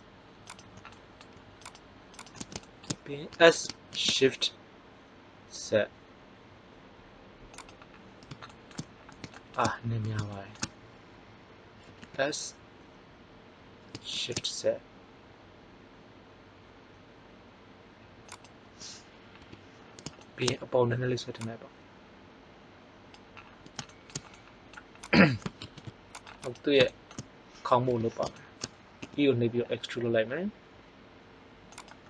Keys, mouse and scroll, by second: 1.7 alt+shift+right click, 3.2 s, 11.9 s, 18.3 click, 19.3 KP_1, 21.4-23.0 drag, 25.0-26.3 drag, 25.6 ctrl+Tab, 26.8 middle click, 27.9 KP_1, 28.9 e, 31.8-32.0 drag.